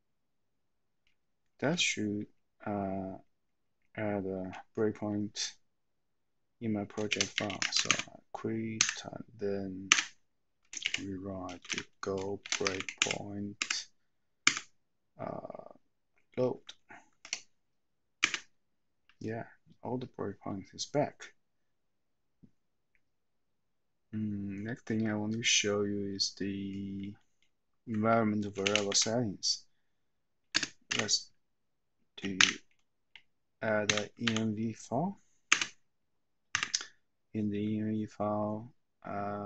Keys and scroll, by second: 7.0-8.2 typing, 8.7 Up, 9.9 Return, 10.8-12.9 typing, 13.5 Tab, 16.6 shift+Tab, 17.0 shift+Tab, 30.6 space, 30.8 ., 34.2 v, 35.6 Return.